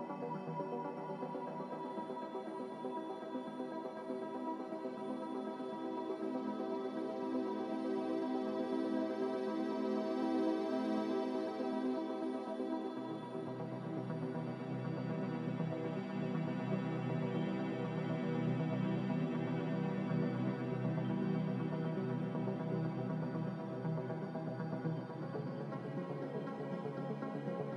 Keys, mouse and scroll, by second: 6.4 5, 6.6 Return, 16.7 1, 16.9 Return.